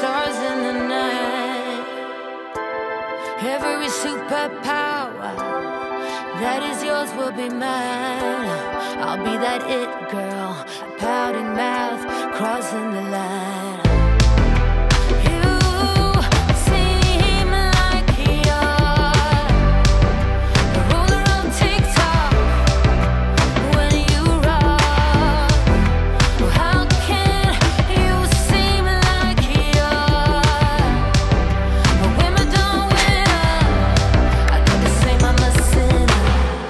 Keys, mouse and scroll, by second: 4.2 space, 6.4 ctrl+s, 7.0 click, 7.3 right click, 7.8 click, 11.0-13.8 typing, 13.9 ctrl+a, 14.9 click, 15.0-16.9 typing, 17.4 click, 22.2-23.3 typing, 24.2 click, 26.8 click, 36.1 p.